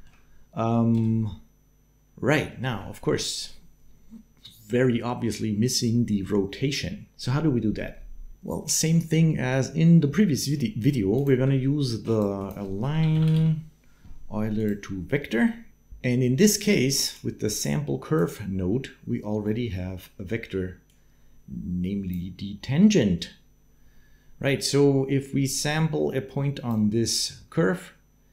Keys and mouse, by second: 0.7 space, 2.6 space, 2.7 shift+middle click, 10.5 shift+click, 11.1 shift+a, 15.7 click, 16.9-18.0 drag, 19.3 click, 20.7-21.9 drag, 25.4-28.3 d, 25.5 click.